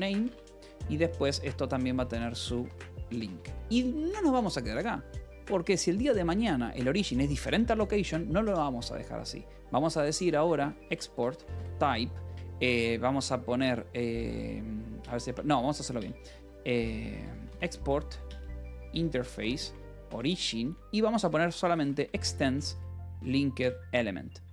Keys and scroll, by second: 0.0-4.6 typing, 10.0-11.7 typing, 14.9 BackSpace, 16.6-23.6 typing.